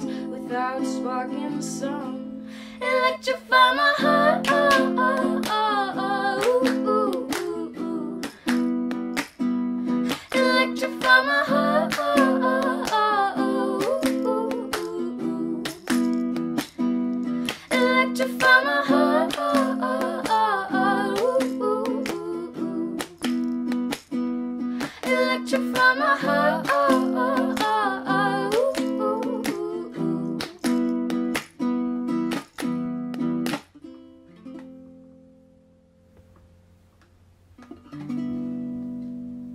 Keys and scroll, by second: 22.7 F9.